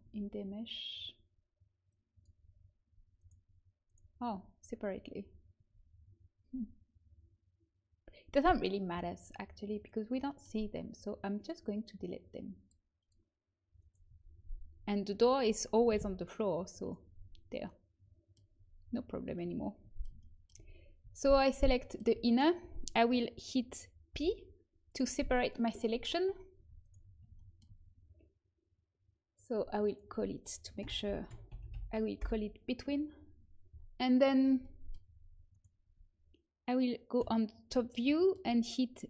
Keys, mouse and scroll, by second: 0.0 Tab, 2.8 Tab, 3.8 right click, 4.2 Tab, 5.5 Tab, 9.7-14.6 drag, 10.2-14.6 right drag, 14.0 Tab, 15.9 Delete, 22.2-24.0 right drag, 24.0 p, 26.5 Tab, 26.8 right click, 29.6-31.5 drag, 31.5 e, 35.8 Tab, 37.1 KP_7.